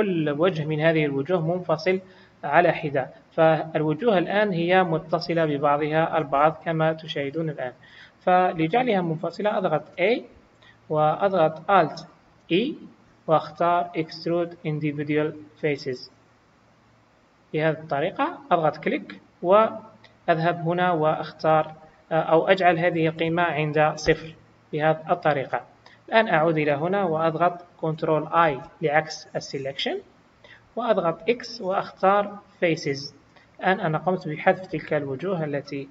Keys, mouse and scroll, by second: 1.8 click, 2.6 g, 5.4 click, 6.2 g, 9.9 a, 12.4 alt+e, 20.8 click, 28.4 ctrl+i, 31.1 x.